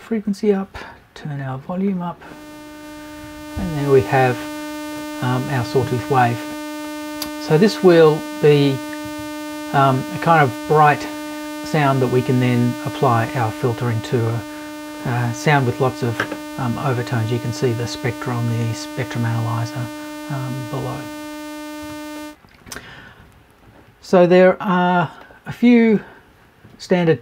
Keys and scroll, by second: 9.0 Left.